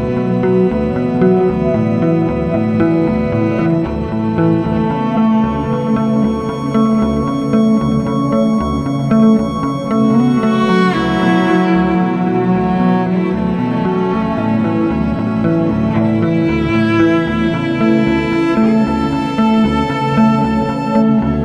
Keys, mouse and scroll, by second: 0.2 click, 0.4 click, 1.1 1, 1.6 Return, 3.5-3.8 scroll, 5.1 click, 6.2 click, 6.3 ctrl+z, 10.3 click, 10.9 click, 13.1 click, 13.3-13.9 scroll, 14.5 scroll, 15.9 scroll, 16.9 click, 17.2 ctrl+z, 19.4 middle click, 20.5 click.